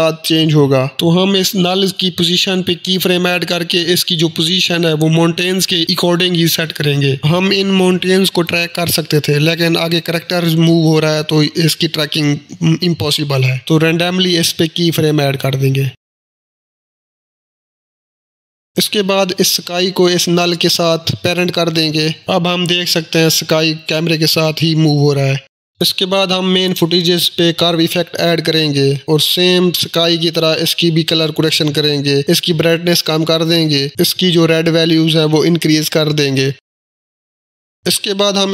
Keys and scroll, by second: 1.2 h, 1.6 v, 2.7 p, 26.4-27.5 typing, 37.5-38.5 typing.